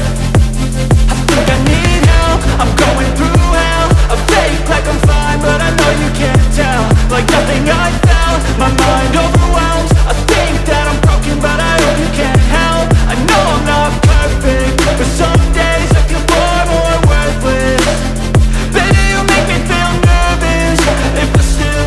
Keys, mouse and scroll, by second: 13.1-21.8 drag.